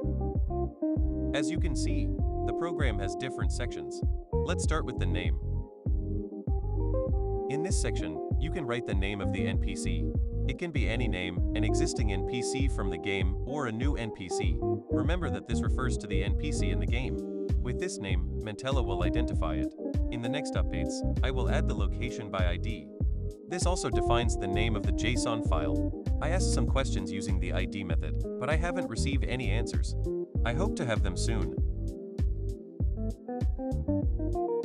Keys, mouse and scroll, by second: 10.0 click, 11.5-13.1 typing, 15.3-18.4 typing, 20.3-22.0 typing, 26.8 click, 28.3 j, 29.8 o, 32.6 click.